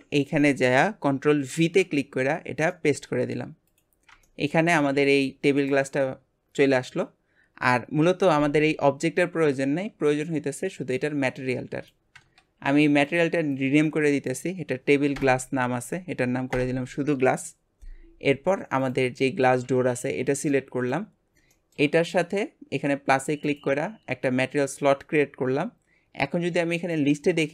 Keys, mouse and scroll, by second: 1.5 ctrl+v, 2.7 middle click, 3.3 scroll up 1, 3.8 click, 4.3-4.7 shift+middle drag, 4.7 g, 18.9 click, 19.2-21.2 shift+middle drag, 21.2-21.5 scroll up 1, 21.5-23.5 shift+middle drag, 23.5-27.5 drag.